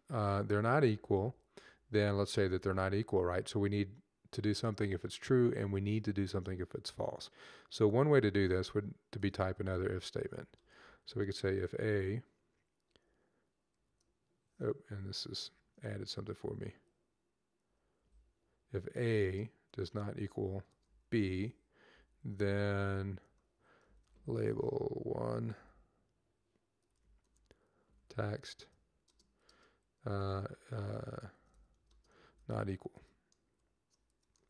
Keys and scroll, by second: 0.0 Left, 0.1 Left, 0.1 Left, 0.3 Left, 0.4 Left, 0.6 Left, 0.7-1.5 typing, 1.9 Left, 2.3 Down, 9.7-11.1 typing, 13.6 typing, 14.8 Left, 16.2 Right, 17.9 typing, 19.5-21.0 typing, 21.8 Right, 21.9 Right, 22.1 typing, 23.5-25.4 typing, 26.6-27.8 typing, 29.3-30.0 typing, 31.0-34.4 typing.